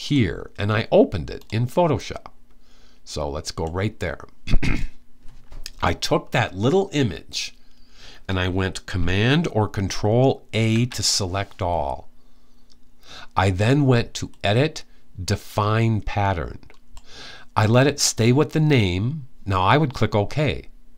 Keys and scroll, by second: 10.3 super+a.